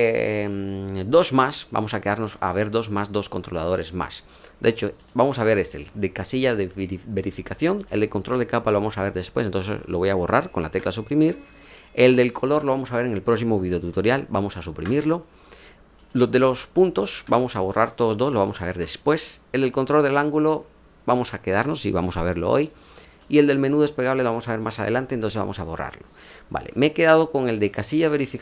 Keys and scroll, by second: 10.6 Delete, 14.6 Delete, 17.0 Delete, 25.1 Delete.